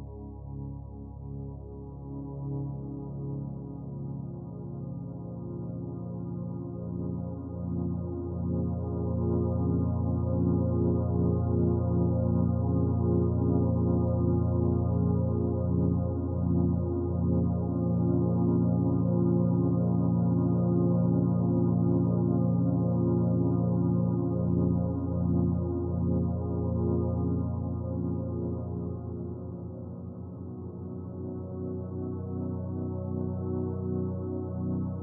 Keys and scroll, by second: 4.6-5.4 typing, 11.3-12.7 typing, 14.1-14.8 typing, 17.5 space, 19.7 space, 27.8-28.7 typing, 30.8-33.3 typing.